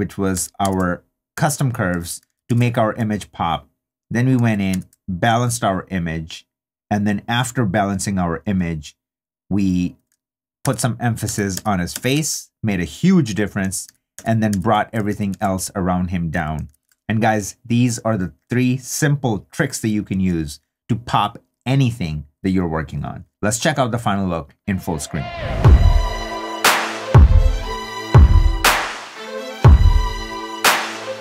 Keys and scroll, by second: 2.3 super+d, 4.7 super+d, 10.6 super+d, 13.8 super+d, 16.7 super+d.